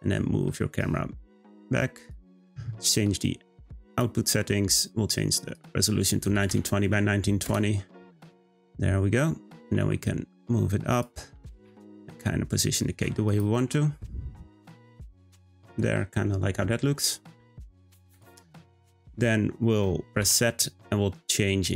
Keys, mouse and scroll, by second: 3.9 click, 5.5-8.4 drag, 8.4-8.8 scroll down 1, 9.6 g, 11.3 g, 13.5 g, 18.1 click, 20.2 z.